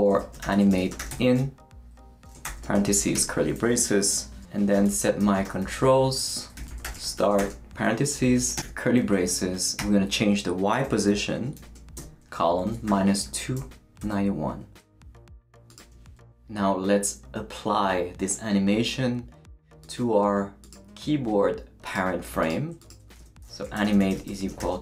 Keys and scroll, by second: 0.0-8.6 typing, 4.1 Return, 8.1 shift+Left, 9.8 shift+y, 11.6-14.5 typing, 23.2-24.8 typing.